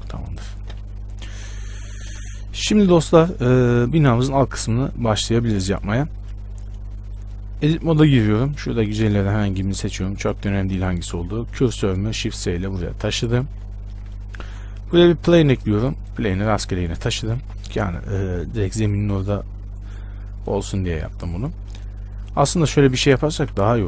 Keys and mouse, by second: 7.7-11.0 middle drag, 7.8 Tab, 11.1 shift+s, 13.5 Tab, 14.7 shift+a, 17.6 KP_7, 18.0 z, 22.7 middle click, 23.1 Tab, 23.5 a.